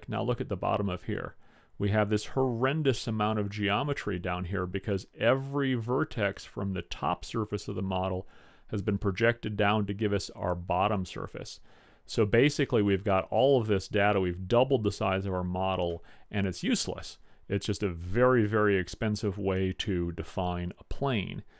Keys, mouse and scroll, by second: 9.6-11.5 middle drag.